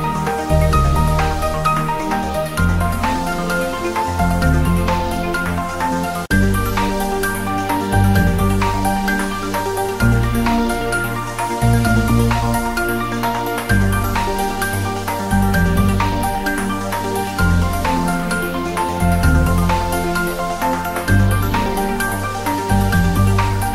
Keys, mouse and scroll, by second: 0.5 click, 1.0 Tab, 1.5 e, 3.9 click, 4.3 f, 4.8 click, 5.1 alt+shift+click, 5.7 ctrl+b, 7.3 scroll up 1, 7.6 click, 7.7 Tab, 7.8 scroll down 1, 8.8 ctrl+3, 9.2-9.8 scroll up 1, 9.8 click, 10.1 Tab, 10.3 click, 10.6 alt+shift+click, 12.5 Tab, 13.0 click, 13.4 ctrl+r, 13.8 click, 14.7 click, 15.2 Tab, 15.6-17.0 drag, 19.2 Tab, 19.9-20.3 scroll down 1, 20.3 click, 20.6 scroll down 1, 20.9 scroll up 1, 21.1 shift+a, 23.5 click.